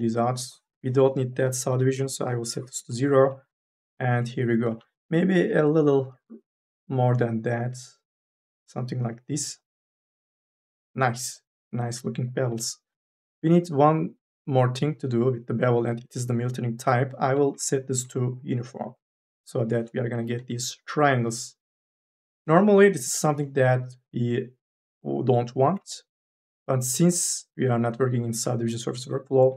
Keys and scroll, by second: 1.5 KP_0, 1.8 Return, 4.9 ctrl+z, 20.0 3, 20.2 e.